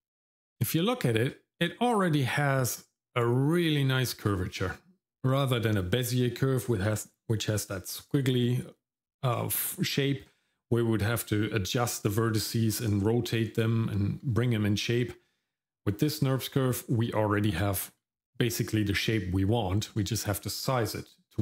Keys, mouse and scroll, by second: 0.9 shift+middle click.